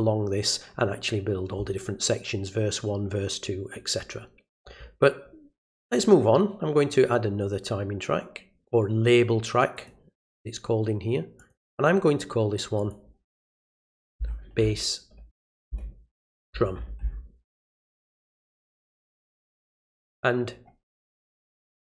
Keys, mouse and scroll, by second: 5.7 click, 9.7 click, 11.4 click, 12.8 click, 18.9 click.